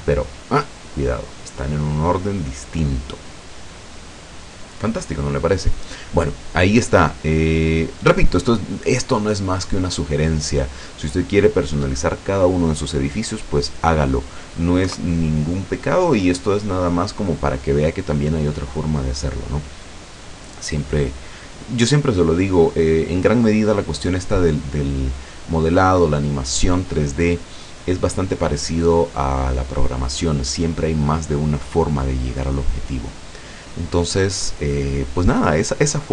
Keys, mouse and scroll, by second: 6.2-11.3 middle drag, 13.6 scroll down 2, 14.9 KP_0.